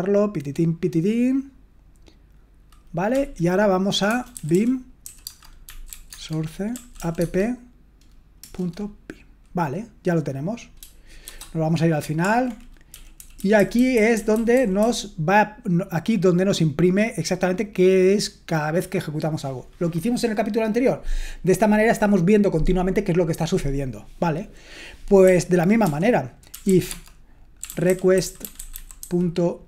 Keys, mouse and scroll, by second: 4.8-7.4 typing, 12.7-14.8 typing, 25.2-29.6 typing.